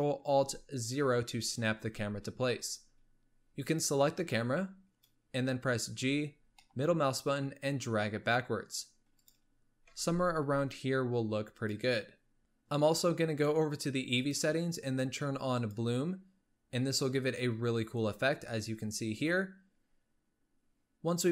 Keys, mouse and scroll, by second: 0.9 ctrl+alt+KP_0, 3.8-5.4 drag, 6.1 g, 9.0 middle click, 9.6-10.0 scroll up 1, 10.0 g, 14.3 click, 16.6 click.